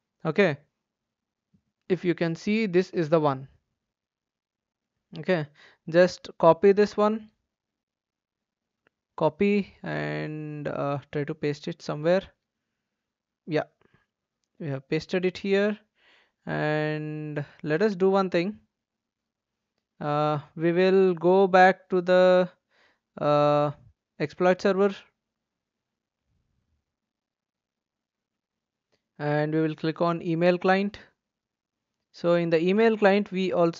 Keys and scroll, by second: 8.1 ctrl+c, 12.8 ctrl+v, 14.5 Return, 14.8 Return, 15.0 Return.